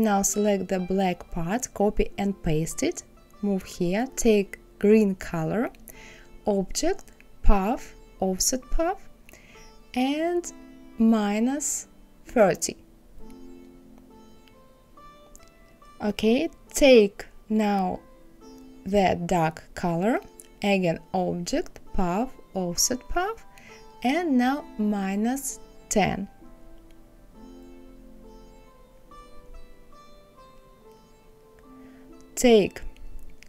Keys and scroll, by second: 0.4 ctrl+v, 12.5 KP_Subtract, 13.0 KP_3, 13.2 KP_0, 25.6 KP_Subtract, 27.5 KP_1, 27.8 KP_0.